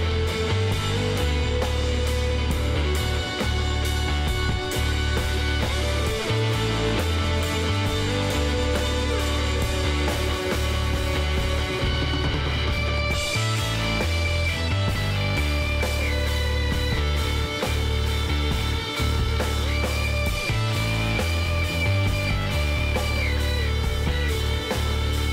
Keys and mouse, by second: 3.8-5.6 middle drag, 6.8 KP_1, 7.6 z, 9.6 s, 13.4 z, 13.8 middle click, 15.2 middle click, 15.7 KP_1, 17.3 s, 19.2 z, 20.7 s, 24.8-25.3 middle drag.